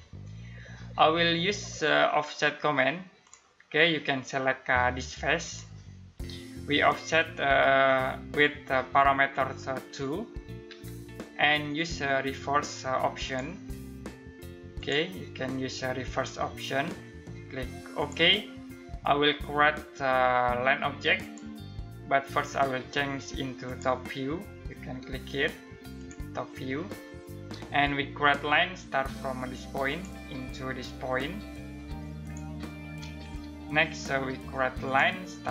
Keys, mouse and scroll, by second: 2.8 click, 10.3 2, 12.8 click, 17.5 click, 20.8 click, 29.4 click, 33.0 Escape, 34.4 click.